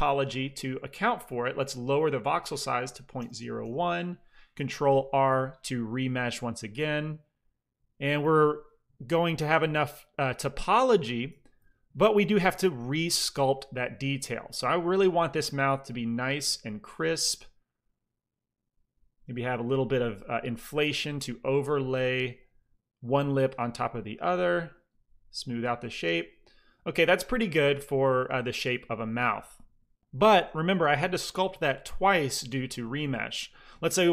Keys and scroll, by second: 2.7 KP_Decimal, 3.1 KP_0, 3.2 KP_1, 3.5 Return, 4.8 ctrl+r, 8.1 f, 10.7 shift+c, 10.9 f, 11.5 f, 20.0 f.